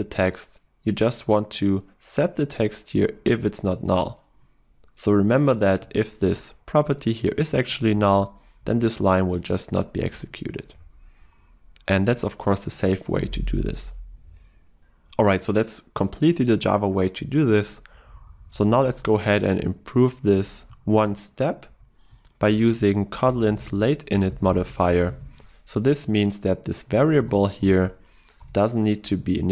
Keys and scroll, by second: 6.2 ctrl+w, 7.9 ctrl+w, 27.3 ctrl+BackSpace.